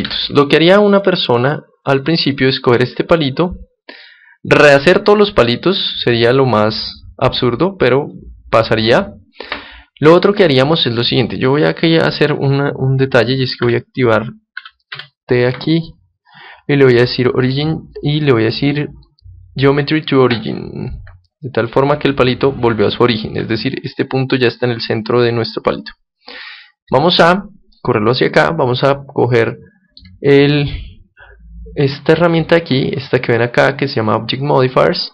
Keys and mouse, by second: 0.8-2.9 middle drag, 1.9-3.8 right drag, 3.0-5.0 middle drag, 5.2-7.0 middle drag, 13.5 n, 14.5 n, 14.8 t, 16.9-19.7 drag, 23.0-26.3 middle drag, 26.8-29.4 drag, 29.4-31.3 middle drag.